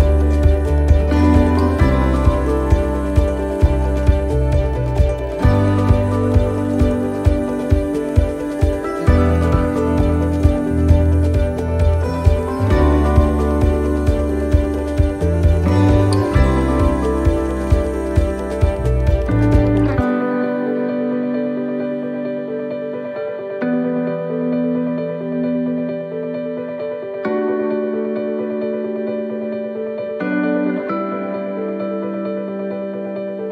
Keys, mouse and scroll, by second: 0.4 shift+middle click, 1.5-2.0 scroll up 2, 2.0 middle click, 3.0 middle click, 3.0 shift+middle click, 4.1 click, 4.9 middle click, 5.5 scroll down 2, 6.4 click, 7.7 middle click, 8.2 scroll down 1, 8.8 middle click, 11.6 shift+d, 13.0 click, 14.4 s, 17.8 shift+middle click, 18.3-19.4 scroll up 3, 19.4 right click, 21.0 shift+right click, 23.3 click, 24.5 s, 32.4 middle click.